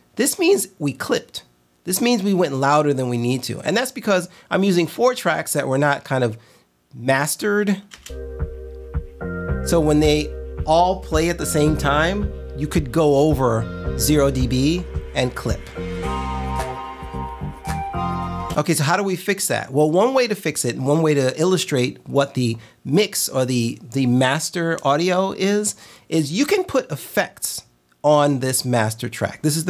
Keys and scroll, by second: 8.0 space, 18.5 space.